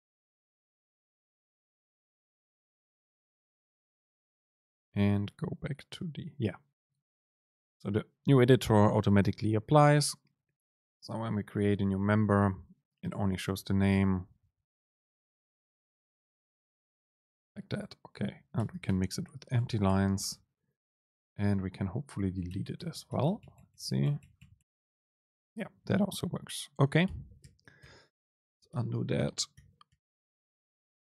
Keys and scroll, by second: 11.0 Return, 11.3 super+space, 14.8 BackSpace, 18.6 Up, 19.6 BackSpace, 21.3 Down, 22.6 BackSpace, 27.1 BackSpace, 27.5 super+z.